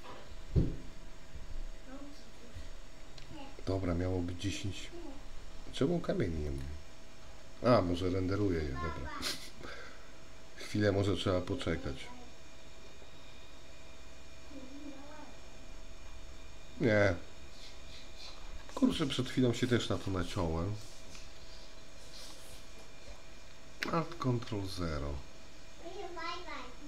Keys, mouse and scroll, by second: 4.3 F12, 9.7 F12, 21.0-22.7 middle drag, 24.2 ctrl+alt+KP_0.